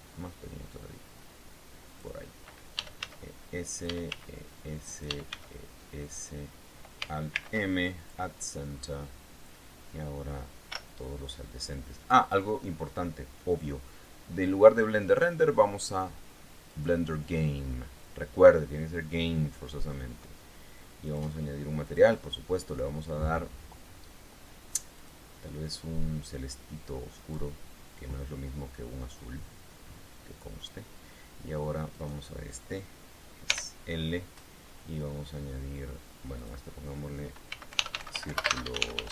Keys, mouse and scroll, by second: 2.2 click, 3.1-5.6 typing, 4.1 click, 5.2 click, 6.4 click, 7.7 alt+m, 8.4 alt+click, 9.0-9.5 scroll up 2, 11.0 l, 15.5 click, 17.1 click, 18.8-19.2 scroll down 1, 20.3 middle click, 21.4 click, 22.2 click, 25.4 click, 27.5 click, 28.9-29.4 scroll down 2, 32.3 right click, 33.8 l, 36.7 click, 37.8-39.1 typing.